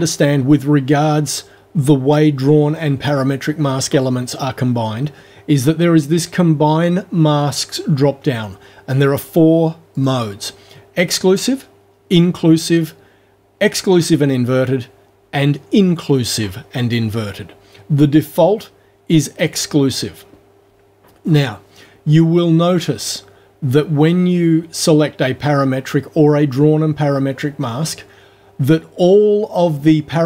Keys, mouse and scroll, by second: 9.9 click, 19.5 click.